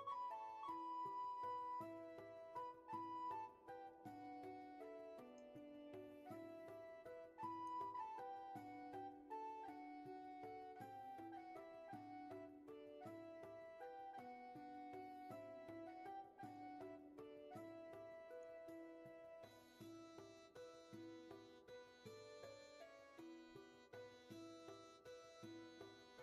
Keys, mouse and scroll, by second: 20.1 ctrl+z, 25.5 ctrl+z.